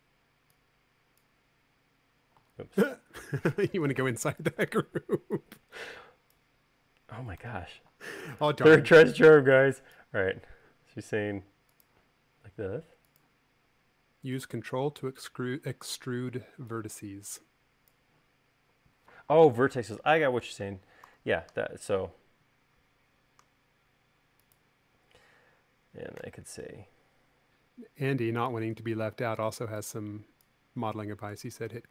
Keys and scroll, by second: 3.3 super+z, 5.3 e, 7.9 super+z, 8.4 space, 9.6 e, 16.6 e, 21.6 v.